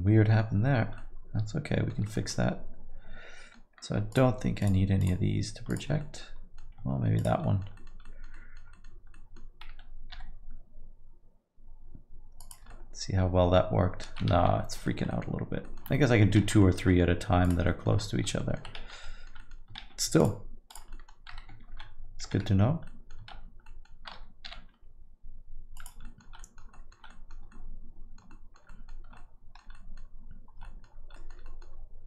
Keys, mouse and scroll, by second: 0.9 alt+middle click, 2.0 middle click, 2.3 alt+middle click, 4.1 shift+click, 4.6 shift+click, 6.0 alt+middle click, 7.2 shift+click, 7.4 alt+middle click, 7.7 alt+middle click, 8.0 alt+middle click, 8.4 alt+middle click, 8.7 alt+middle click, 9.1 middle click, 10.1 g, 12.7 alt+middle click, 14.4 ctrl+z, 14.8 alt+middle click, 15.1 middle click, 15.6 alt+middle click, 15.9 middle click, 16.2 scroll down 1, 16.4 shift+z, 16.6 alt+middle click, 16.9 middle click, 17.4 click, 17.6 alt+middle click, 18.4 alt+middle click, 18.8 shift+z, 19.0 alt+middle click, 19.4 middle click, 19.8 shift+z, 20.2 shift+click, 20.7 shift+click, 20.9 alt+middle click, 22.8 middle click, 23.3 shift+z, 23.6 middle click, 24.4 g, 26.0 alt+middle click, 26.4 middle click, 26.7 alt+middle click, 27.1 middle click, 27.5 alt+middle click, 28.3 alt+middle click, 28.9 scroll down 3, 29.1 alt+middle click, 29.7 middle click, 30.6 alt+middle click, 31.1 middle click, 31.4 alt+middle click.